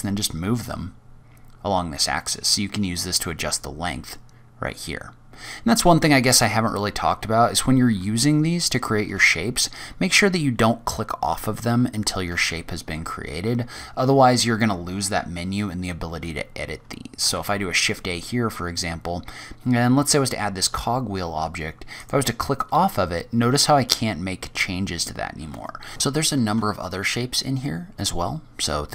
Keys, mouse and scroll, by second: 3.5-3.9 scroll down 3, 3.9-5.0 scroll up 4, 5.0-6.0 scroll down 2, 5.4 click, 6.0 Tab, 6.6-6.9 scroll down 2, 6.9-7.3 scroll up 2, 8.6 shift+right click, 9.3-9.6 scroll down 2, 9.6-11.7 scroll up 4, 12.3 shift+a, 17.2 shift+a, 21.8 click, 25.9 Tab, 25.9 Delete, 25.9 click, 26.4 shift+a.